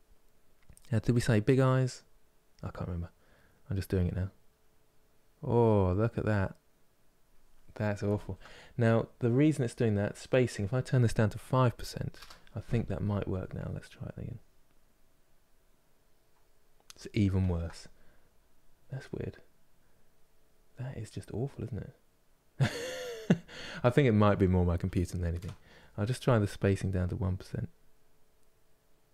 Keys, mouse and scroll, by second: 3.2-5.8 drag, 7.9 ctrl+z, 14.6-17.2 drag, 17.2 ctrl+z, 27.6-29.1 drag.